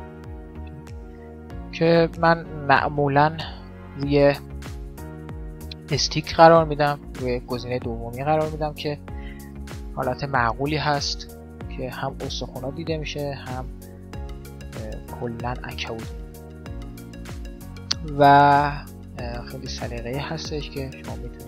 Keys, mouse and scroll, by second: 0.2-2.0 drag, 2.2-3.7 middle drag, 3.8 middle click, 9.2-10.9 middle drag, 11.1 middle click, 12.8 click, 12.8 right click, 14.0 click, 15.4 middle click, 19.4-21.2 drag, 21.2 middle click.